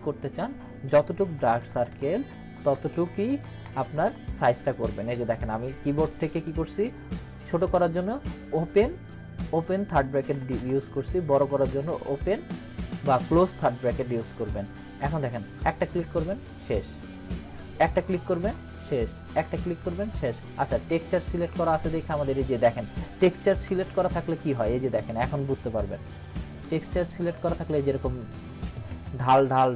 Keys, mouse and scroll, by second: 1.2-3.6 typing, 9.9-12.2 typing, 14.4 typing, 15.6 click, 23.6 ctrl+=, 25.9-26.5 click, 26.7 scroll up 1.